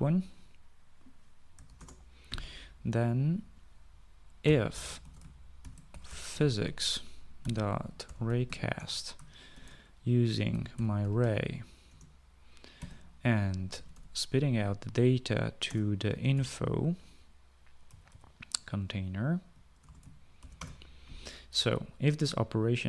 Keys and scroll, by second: 1.8-2.5 typing, 4.6-14.7 typing, 12.2 Return, 16.0-17.2 typing, 18.2 Right, 18.4 Right, 19.7 ), 20.2 BackSpace, 20.7 {, 20.9 {, 20.9 Return.